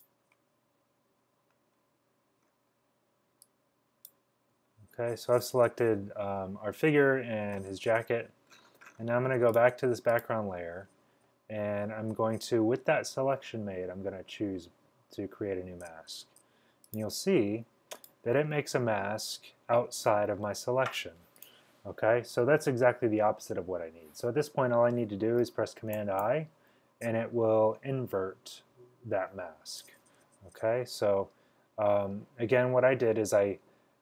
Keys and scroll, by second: 26.0 super+i.